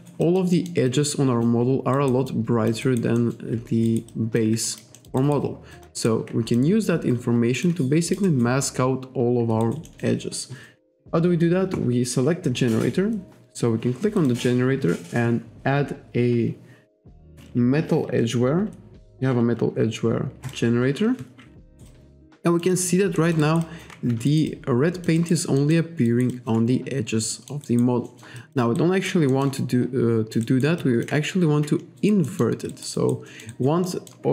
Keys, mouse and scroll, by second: 0.6 alt+middle click, 0.9 alt+click, 2.0 alt+right click, 2.3 alt+click, 2.9 alt+right click, 3.2 alt+middle click, 3.9 alt+right click, 4.1 alt+click, 4.7 alt+click, 5.0 alt+middle click, 5.7 alt+click, 6.0 alt+right click, 6.5 click, 6.9-7.3 scroll up 1, 7.6 click, 8.0 alt+middle click, 8.3 alt+right click, 9.6 alt+right click, 9.9 alt+middle click, 14.2 click, 20.5 click, 21.7 alt+right click, 21.9 alt+click, 22.7 alt+right click, 23.2 alt+middle click, 23.4 alt+right click, 23.6 alt+click, 24.3 alt+right click, 24.5 alt+click, 25.6 alt+middle click, 26.1 alt+right click, 26.3 alt+click, 27.3 alt+middle click, 28.1 alt+middle click, 28.4 alt+click, 28.8 alt+right click, 29.3 alt+middle click, 30.2 alt+click, 30.5 alt+right click, 30.8 alt+click, 32.0 alt+right click, 32.3 alt+middle click, 32.7 alt+right click, 33.3 alt+middle click, 33.5 alt+right click, 33.9 alt+middle click.